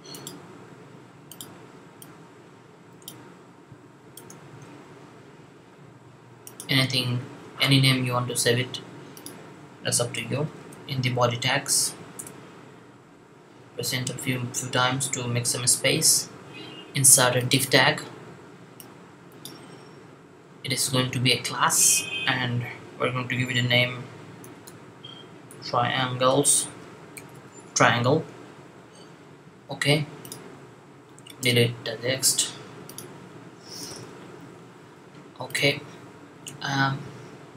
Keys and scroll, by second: 4.5 6, 13.3 Up, 14.0 Up, 14.9 Down, 24.3-27.2 typing.